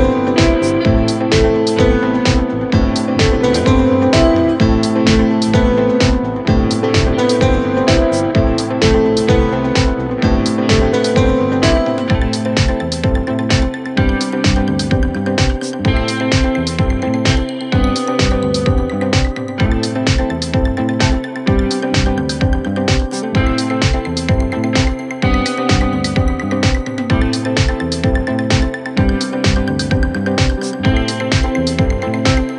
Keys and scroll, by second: 1.9 Escape, 5.5 ctrl+z, 5.8 F1, 17.2 f, 18.6 F9, 26.8 F9.